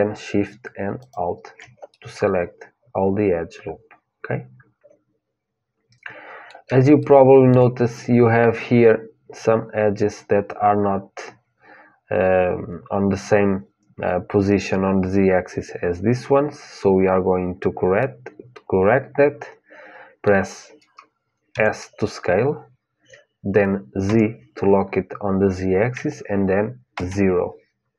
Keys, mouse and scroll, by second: 0.8-2.8 drag, 2.8 middle click, 6.7-8.7 middle drag, 17.7-19.7 middle drag, 21.3 s.